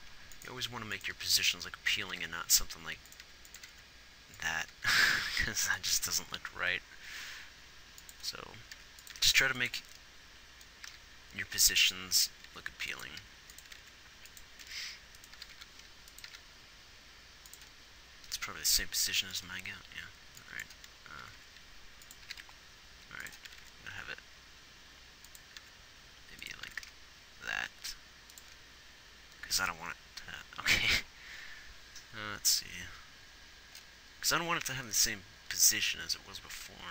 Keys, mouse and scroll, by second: 0.0 r, 1.0 r, 1.4 g, 3.5 r, 5.0 r, 7.5 r, 9.2 r, 9.5 r, 11.1 g, 12.9-16.5 typing, 21.5 r, 22.5 g, 23.8 r, 25.9 r.